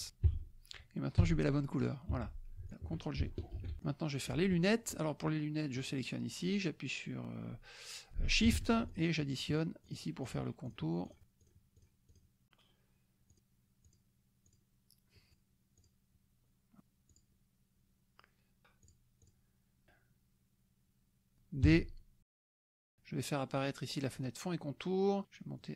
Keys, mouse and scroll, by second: 0.3 Escape, 1.2 d, 1.8 click, 2.1 F1, 2.7 shift+drag, 3.7 ctrl+g, 3.8-4.5 drag, 5.9 click, 8.9 shift+click, 9.3 shift+click, 10.0 shift+click, 10.6 shift+click, 11.0 shift+click, 11.5 shift+click, 11.8 shift+click, 12.1 shift+drag, 13.8 shift+click, 14.6 shift+click, 15.3 shift+click, 15.8 shift+click, 16.8 shift+click, 17.1 shift+click, 17.3 shift+middle click, 18.9 shift+click, 19.3 shift+click, 21.6 shift+d, 24.2 click.